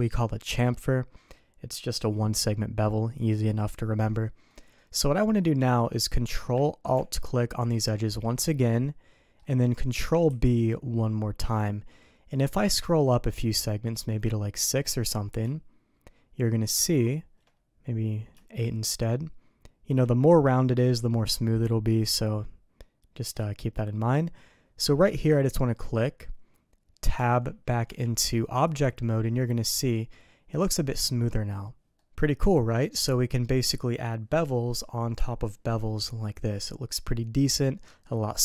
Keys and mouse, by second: 4.5 middle click, 7.5 ctrl+alt+click, 8.6 middle click, 10.2 ctrl+b, 27.1 Tab, 27.8 Tab, 29.3-31.3 middle drag, 31.9 middle click, 32.5 middle click.